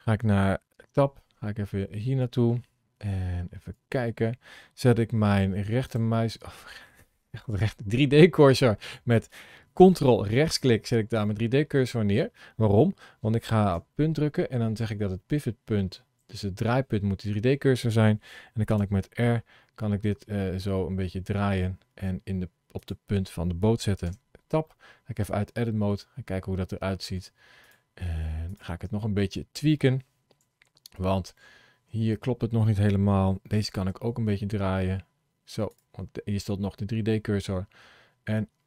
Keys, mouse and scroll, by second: 0.6 Tab, 2.1 click, 5.7 shift+right click, 15.2 ., 18.8 r, 24.1 Tab, 24.5 middle click, 27.5 click, 28.5 click, 28.7 Tab, 30.3 KP_3, 30.9 KP_1, 33.7 r, 37.0 middle click.